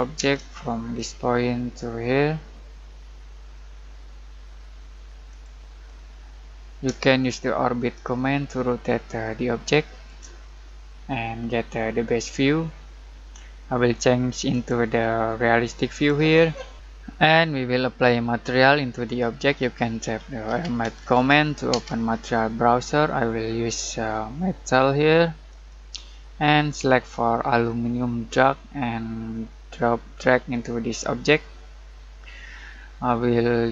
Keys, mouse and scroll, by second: 0.0-0.2 typing, 0.9 click, 5.3 click, 5.8-7.2 middle drag, 7.2-10.7 shift+middle drag, 10.7 scroll up 1, 11.4 middle click, 11.8-12.2 scroll down 1, 12.2-14.5 middle drag, 14.5 click, 19.8-21.7 typing, 25.5 click, 28.3-33.7 drag.